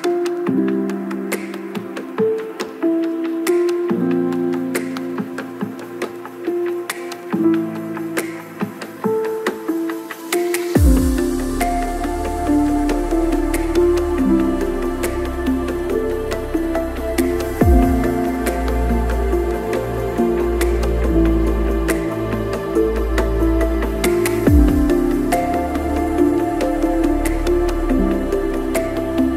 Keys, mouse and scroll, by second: 0.2 ctrl+l, 0.4 click, 0.7 shift+middle click, 1.1 click, 1.8 BackSpace, 2.2-4.9 drag, 5.2 click, 5.4 click, 5.7 click, 5.9 click, 6.6 click, 6.7 KP_0, 7.0 KP_0, 8.8 click, 9.9 click, 10.3 shift+click, 10.6 right click, 10.9 shift+middle click, 11.1 middle click, 11.3 scroll, 11.8 middle click, 11.9 scroll, 12.2 click, 12.5 click, 13.3 click, 14.3 click, 14.6 click, 15.0 click, 16.1-17.3 shift+drag, 17.6 middle click, 17.8 click, 18.4 click, 19.0 click, 19.2 click, 19.6 middle click, 20.8 click, 21.2 click, 22.5 click, 23.0 click, 23.4 click, 23.7 click, 23.9 middle click.